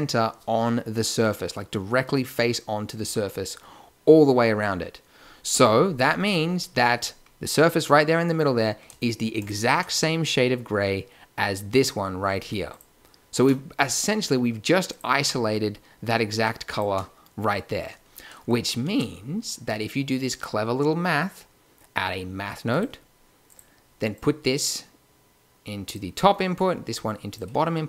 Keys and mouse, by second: 9.4 click, 10.2 click, 10.4-11.8 drag, 12.7-14.3 drag, 16.7 click, 18.2 click, 18.4-18.8 middle drag, 18.8 shift+a, 24.1-26.0 drag, 26.5-27.8 drag.